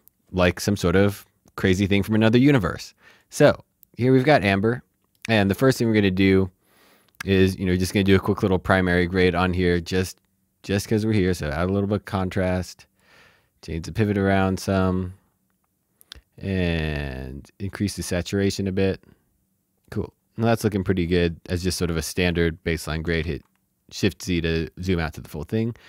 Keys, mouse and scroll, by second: 1.7 click, 4.0 middle click, 9.7-15.0 drag, 16.3 click, 17.8 click, 20.1-21.5 scroll down 1, 21.5 middle click, 23.2 shift+z.